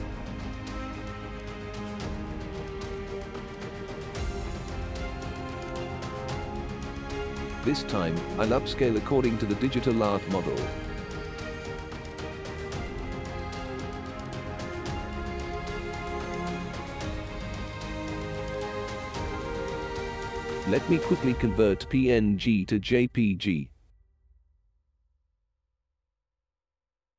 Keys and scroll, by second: 24.0 Return, 24.0 c, 24.2 ctrl+a.